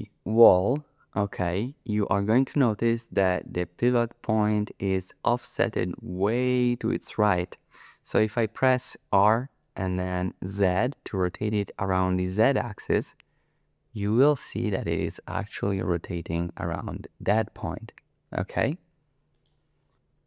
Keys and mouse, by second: 9.2 r, 10.5 z, 19.3 click.